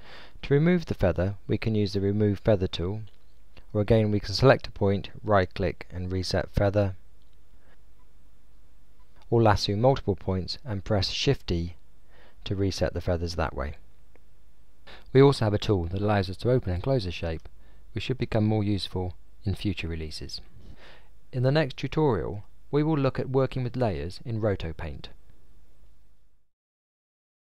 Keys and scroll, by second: 12.3 e.